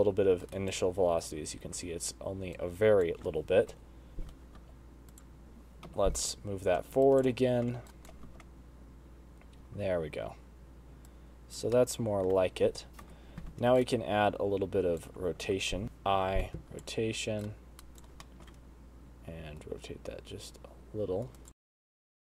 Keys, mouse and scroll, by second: 1.0 shift+right click, 1.2 space, 1.9 space, 2.9 shift+right click, 4.0 KP_1, 4.9 g, 6.1 i, 7.4 shift+click, 8.2 shift+right click, 8.6 space, 9.9 space, 11.4 click, 12.0 middle click, 13.4 KP_1, 14.1 shift+right click, 15.8 i, 16.5 i, 17.8 shift+right click, 18.6 shift+middle click, 19.9 r, 21.6 shift+right click, 21.6-22.4 typing, 21.9 shift+right click, 22.2 shift+right click.